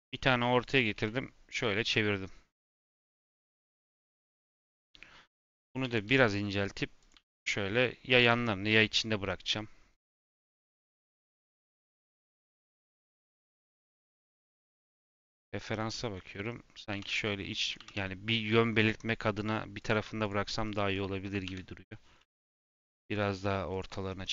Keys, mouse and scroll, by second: 0.9 r, 3.2 click, 3.4 middle click, 4.1 scroll up 2, 4.5 middle click, 5.3 click, 5.7 s, 7.1 g, 8.5-14.6 middle drag, 15.1-16.8 middle drag, 16.8 g, 20.1 shift+click, 20.6 shift+click, 21.4 KP_7, 22.3 g, 24.1 scroll down 1, 24.2-24.3 middle drag.